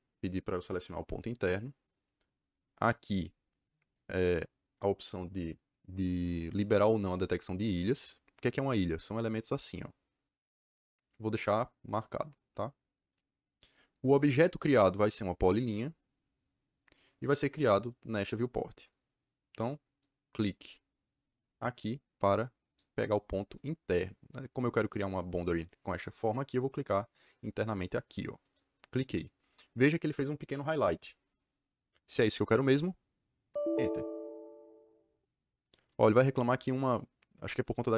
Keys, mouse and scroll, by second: 19.9 click, 28.3 click, 33.4 KP_Enter.